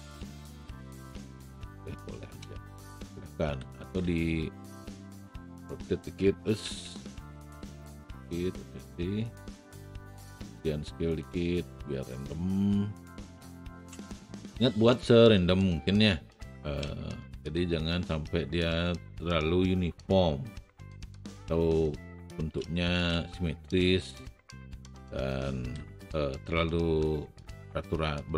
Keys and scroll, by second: 3.6 r, 4.0 e, 13.4 w, 23.1 shift+r, 25.8 e.